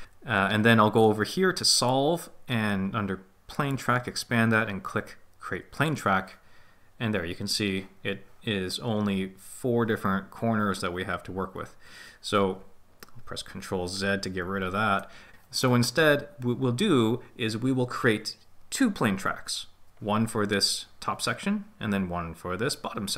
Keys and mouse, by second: 3.6 click, 14.4 ctrl+z.